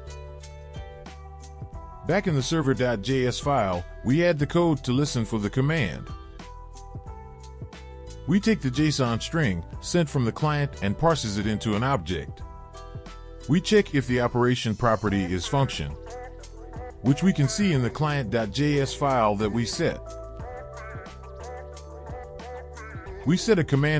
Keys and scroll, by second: 5.0 Return, 5.2 Return, 5.9 Return, 5.9 ctrl+v, 5.9 BackSpace.